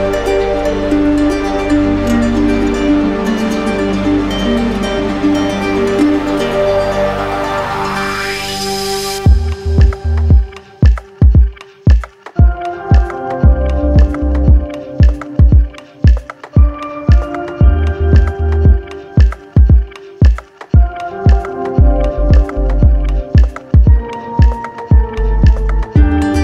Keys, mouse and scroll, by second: 0.3-1.4 drag, 2.7-3.8 drag, 6.7-7.8 drag, 8.5-9.6 drag, 10.1-11.2 drag, 13.8-14.9 drag, 18.5 click, 19.4 click, 22.2 click, 24.1 alt+click, 26.3 alt+click.